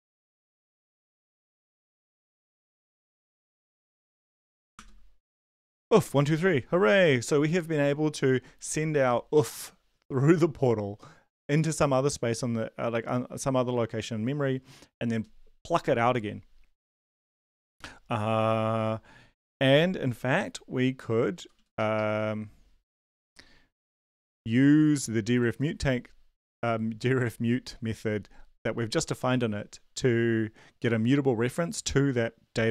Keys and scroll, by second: 0.0-1.8 typing, 2.6 ctrl+s, 4.3 ctrl+l, 4.6 Up, 4.7 Return, 21.4 Down, 21.5 Down, 21.7 ctrl+Left, 21.9 ctrl+Left.